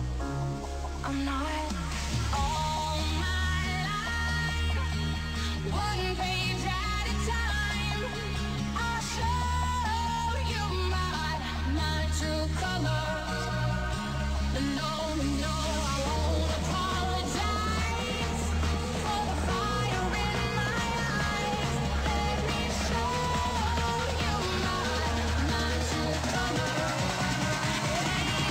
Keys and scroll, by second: 5.4 shift+Up, 11.6 shift+Up, 13.6 shift+Down, 13.9 shift+Up, 20.4 shift+Up, 22.6 ctrl+s, 25.5 ctrl+s, 26.5 space.